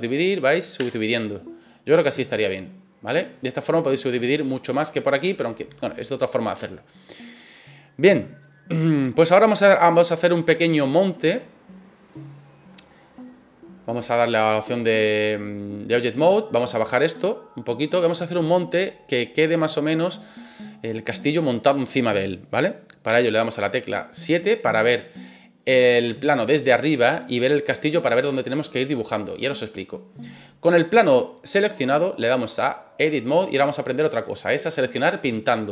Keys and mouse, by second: 0.8 w, 2.5 middle click, 4.0 middle click, 6.0 click, 8.4 right click, 8.8 middle click, 10.1 middle click, 12.4 click, 15.9 click, 16.8-17.8 drag, 18.0-19.1 middle drag, 21.2 middle click, 23.0 KP_7, 32.5-33.4 drag.